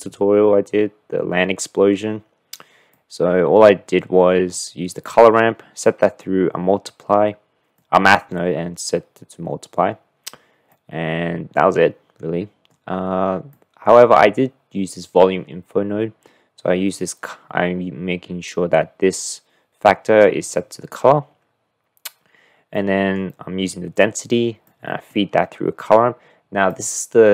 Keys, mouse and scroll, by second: 2.9-4.6 drag, 7.7 click, 10.7-12.7 drag, 13.6 click, 22.7 click, 23.1-23.7 middle drag, 24.7 middle click, 26.9 middle click.